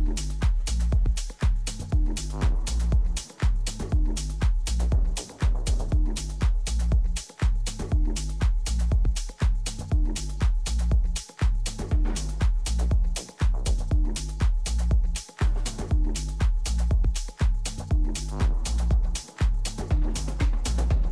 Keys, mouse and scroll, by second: 4.7 b, 6.3-8.1 drag, 7.6 a, 8.4 b, 9.4-11.3 drag, 10.6 a, 11.3-13.0 middle drag, 12.6 b, 13.6-15.6 drag, 14.9 a, 15.6 b, 16.9-18.8 drag, 19.4 middle click.